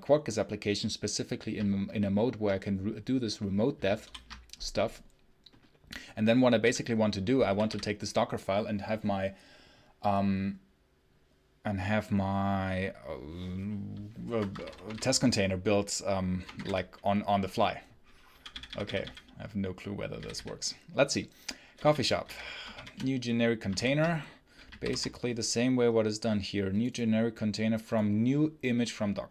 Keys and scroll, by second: 3.9 ctrl+super+l, 6.5 j, 7.3 w, 14.2 Escape, 14.4 space, 14.5 h, 14.7 space, 14.8 h, 16.2-17.0 typing, 18.2 k, 20.0 d, 21.6 j, 22.1 f, 22.6 shift+9.